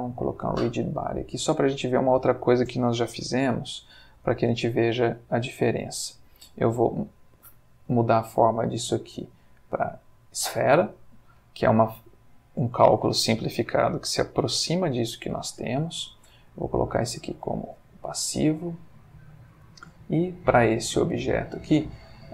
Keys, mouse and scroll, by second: 0.1 click, 1.8 click, 2.9 g, 3.4 z, 4.3 click, 7.9 click, 9.9 click, 11.4 middle click, 15.4 click, 16.5 click, 17.2 click, 19.9 click.